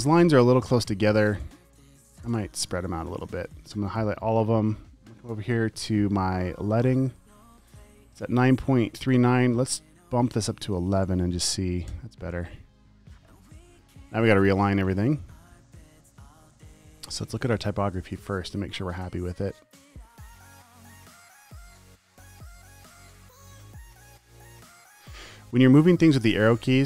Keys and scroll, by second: 0.9 space, 1.8 space, 2.3 space, 3.5 t, 4.0 super+a, 11.0 typing, 16.7 space, 17.2 space, 21.2 space, 21.7 super+space, 23.7 shift+Up, 24.3 Up.